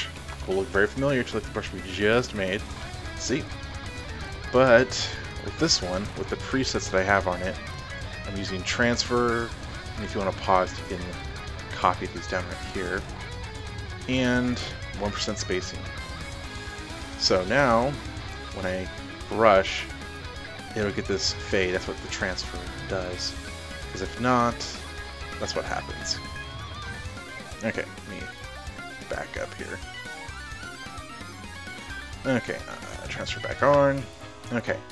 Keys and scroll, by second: 0.1-2.8 typing, 3.9-6.1 typing, 6.3 F5, 28.4 ctrl+alt+z, 29.2 ctrl+alt+z.